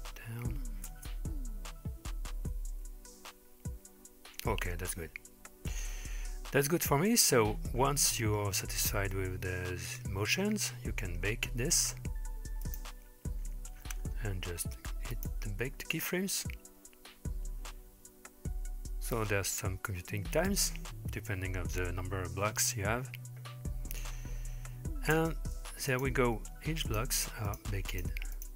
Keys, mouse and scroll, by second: 0.9 space, 10.2-12.2 scroll down 9, 12.2-12.7 scroll down 1, 12.7 click, 13.8-14.6 scroll down 3, 15.2-23.3 drag, 25.2 space, 25.9 click, 26.9 click, 27.5 click, 27.9 drag, 28.4 click.